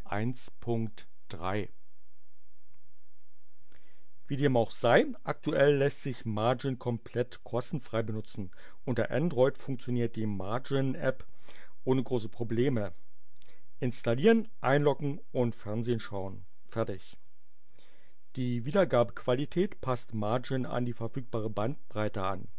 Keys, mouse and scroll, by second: 0.0 click.